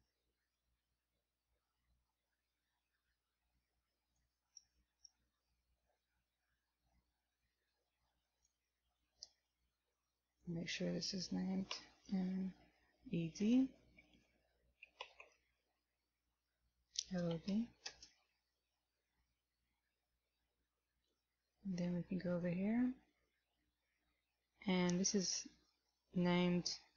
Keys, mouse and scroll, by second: 4.1 click, 21.1 click, 22.3 right click.